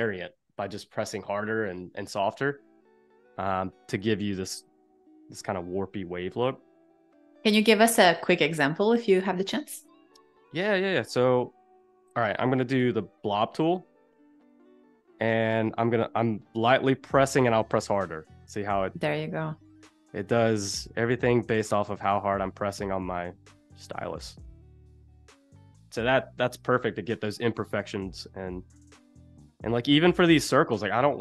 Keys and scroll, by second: 4.0 z, 9.6 a, 12.8 shift+b, 26.5 super+z.